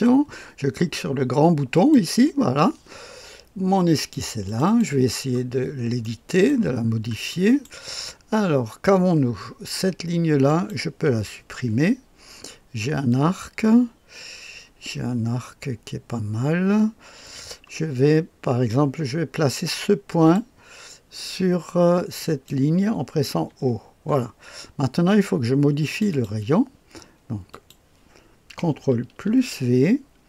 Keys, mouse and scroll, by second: 1.7 click, 3.9 click, 4.4 click, 5.5-5.9 scroll up 1, 5.9 middle click, 6.8-7.9 scroll up 1, 7.2 middle click, 10.4 click, 11.3 Delete, 13.0-20.3 drag, 22.1 click, 23.4 o, 25.8 click, 26.0 click, 27.4 click, 29.2 ctrl+v.